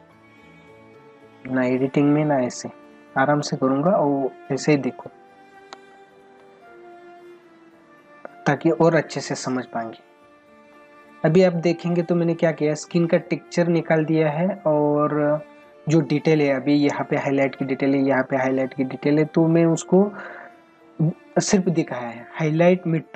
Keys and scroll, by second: 5.7 space, 6.7 s, 8.9 ctrl+=, 10.7 space, 21.3 space.